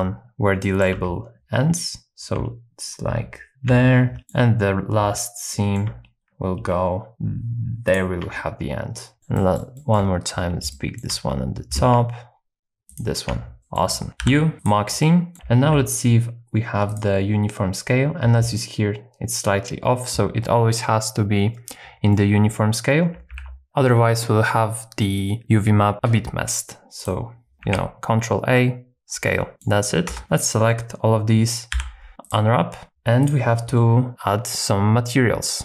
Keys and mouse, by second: 0.6 shift+middle click, 4.2 shift+middle click, 5.5 shift+middle click, 7.1 alt+shift+KP_1, 9.2 shift+middle click, 10.7 shift+middle click, 12.9 alt+shift+click, 13.6 shift+middle click, 14.2 u, 15.0 middle click, 15.3 Tab, 15.7 n, 22.1 middle click, 23.3 ctrl+a, 27.6 ctrl+a, 29.5 middle click, 30.1 Tab, 30.2 a, 31.7 u, 32.8 Tab.